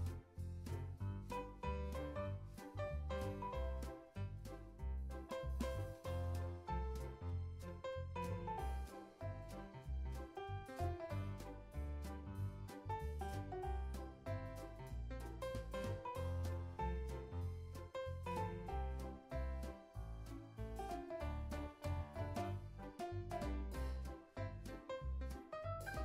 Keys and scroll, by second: 2.9 z, 3.8 x, 13.5 space, 21.6 space, 21.8 super+s.